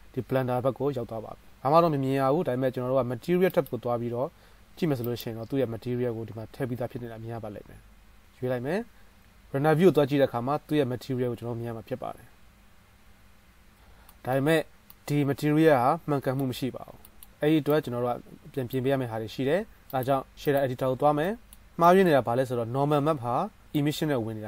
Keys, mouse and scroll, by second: 3.9-5.4 drag, 9.4 z, 13.3 middle click, 13.8 drag, 13.9-15.6 shift+middle drag, 15.6-17.0 right drag, 17.0-19.8 shift+drag, 17.8-19.8 middle drag, 17.8-19.8 right drag, 19.9-21.3 drag, 19.9-21.3 middle drag, 19.9-21.3 right drag.